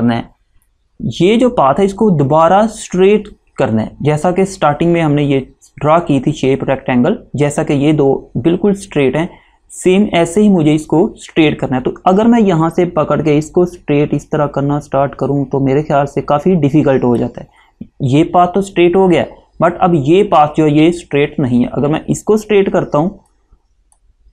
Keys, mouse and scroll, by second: 12.8 click, 23.4 click.